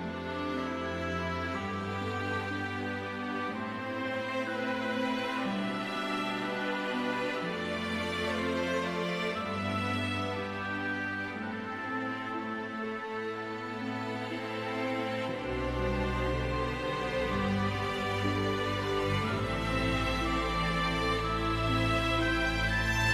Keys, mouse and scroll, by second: 0.4 middle click, 4.5 middle click, 5.3 click, 6.0-6.6 scroll down 1, 6.8 typing, 8.2 scroll down 1, 10.5 click, 12.0 click, 14.2 click, 20.5 click, 22.9 click.